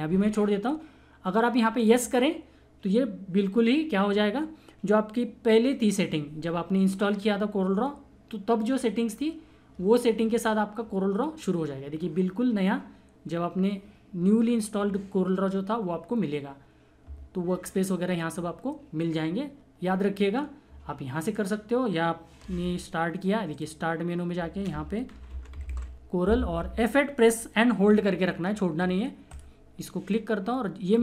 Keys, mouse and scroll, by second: 4.0 click, 21.2 click, 22.6 typing, 23.5 click, 25.0-26.3 typing, 27.8 3, 29.1 3, 29.3 click, 29.4 F8.